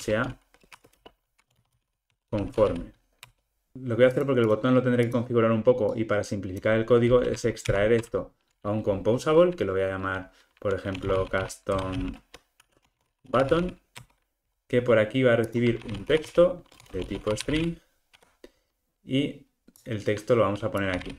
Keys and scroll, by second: 0.1 Return, 7.6 alt+super+m, 18.2 Escape.